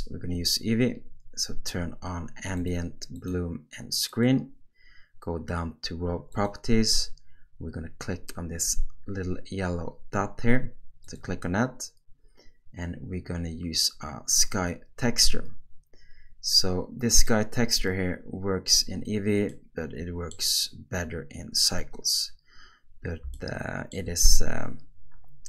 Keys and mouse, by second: 2.6 click, 3.1 click, 4.1 click, 11.1-17.3 drag, 19.5 middle click, 23.4-23.9 shift+middle drag, 24.2-25.4 middle drag.